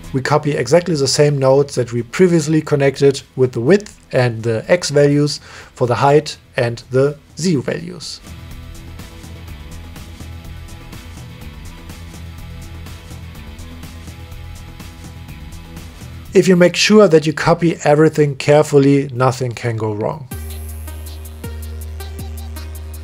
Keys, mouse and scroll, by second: 0.7 middle click, 1.7-2.2 middle drag, 2.5 middle click, 3.7 middle click, 4.5 shift+d, 6.6-7.2 drag, 7.7 click, 8.7 click, 9.3 click, 9.9 shift+d, 13.0 click, 13.7-15.2 drag, 15.6 click, 15.8 middle click, 16.6 click, 17.9 middle click, 18.9 click, 19.1 click, 21.4 click, 22.2 click, 22.9 shift+d.